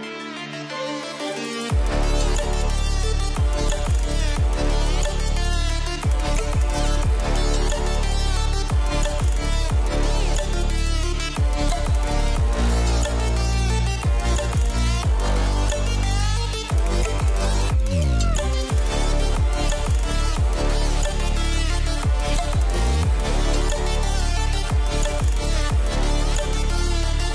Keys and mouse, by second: 0.5 shift+middle drag, 2.8 shift+middle click, 3.8 click, 4.0 middle click, 4.9 KP_0, 6.1 s, 8.1 click, 8.7 s, 10.4 click, 10.7 s, 11.5 click, 12.6 click, 13.5 shift+middle click, 20.0 s, 21.6 click, 22.0 s, 22.6 click, 24.4 shift+middle click, 25.1-26.1 middle drag.